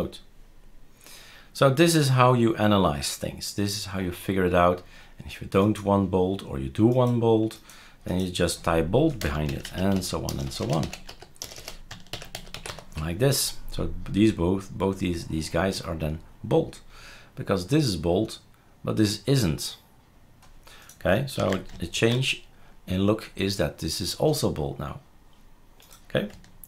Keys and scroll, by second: 9.2-13.5 typing, 21.4 ctrl+s, 22.0 shift+super+r.